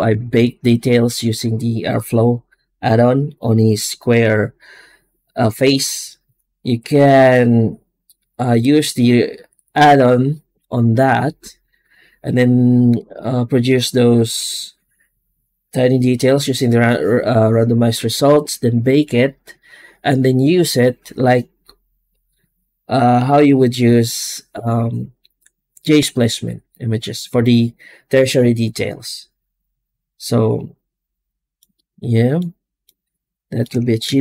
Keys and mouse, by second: 0.0 ctrl+space, 32.2 middle click, 32.8-34.2 middle drag.